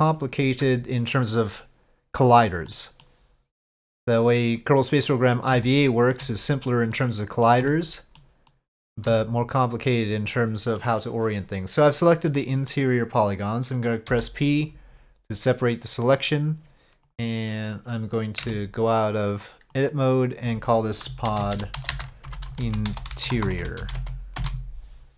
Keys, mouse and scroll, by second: 0.1 shift+click, 2.7 middle click, 5.0 middle click, 5.6 shift+middle click, 6.9 middle click, 7.7 shift+middle click, 8.5 shift+middle click, 10.3 middle click, 12.3 middle click, 14.1 p, 18.6 Tab, 19.8-25.1 drag.